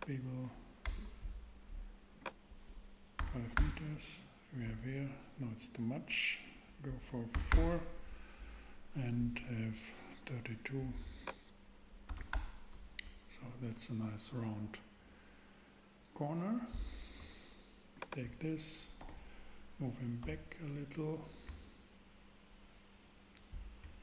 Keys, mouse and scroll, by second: 0.8 Return, 3.2 5, 3.5 Return, 7.3 4, 7.5 Return, 12.0 3, 12.1 2, 12.3 Return, 19.0 super+g, 20.2 x, 21.5 Up.